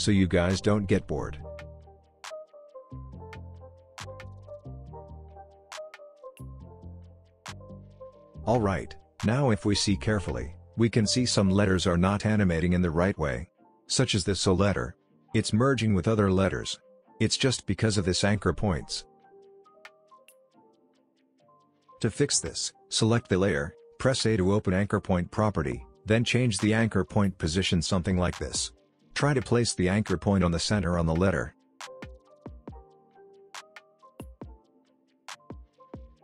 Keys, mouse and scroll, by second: 0.2 click, 0.6 p, 0.8 click, 1.0-1.6 shift+click, 2.1 ctrl+d, 2.2 click, 2.4 shift+o, 2.6 click, 2.8 p, 2.9 click, 4.1 ctrl+d, 4.2 click, 4.4 shift+n, 4.6 click, 4.9 p, 5.0 drag, 8.2 space, 13.1 space, 14.1-14.7 click, 14.5 space, 17.4-18.6 drag, 25.7 a, 27.5-30.6 drag, 35.5 p.